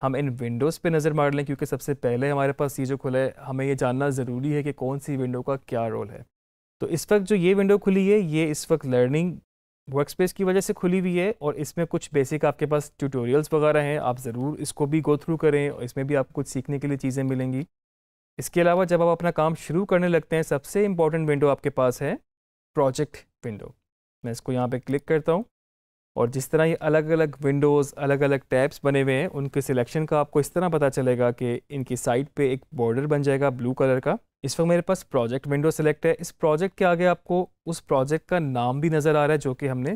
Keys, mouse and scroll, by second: 17.2 scroll down 1, 18.3 scroll up 1, 24.7 click.